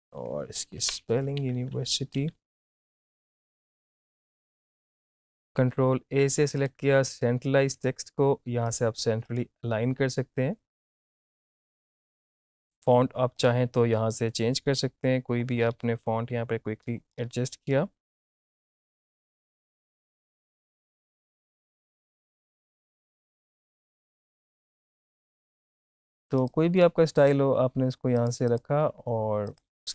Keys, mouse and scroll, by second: 1.4 ctrl+Right, 2.8 Return, 2.9-5.4 typing, 6.6 click, 11.1 typing, 11.7 click, 12.3 ctrl+z, 12.4 click, 12.5 ctrl+a, 13.4 click, 18.6 scroll down 1, 18.6 click, 19.5 click, 19.7-20.1 scroll down 1, 20.7 scroll up 1, 20.7 click, 21.6 click, 22.7 ctrl+a, 22.7-25.4 typing, 26.0 click.